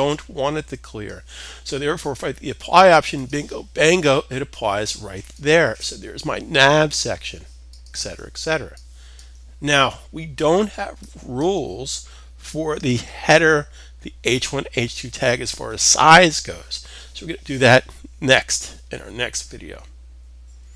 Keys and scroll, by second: 15.8 super+s.